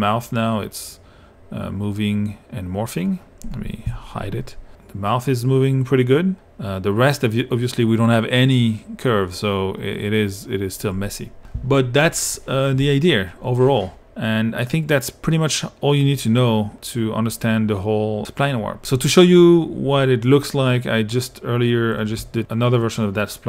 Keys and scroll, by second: 3.9 q.